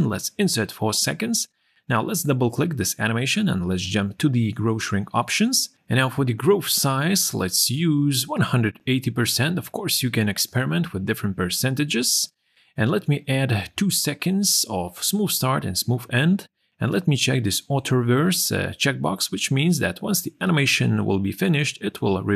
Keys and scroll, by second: 7.7 8, 13.4 2.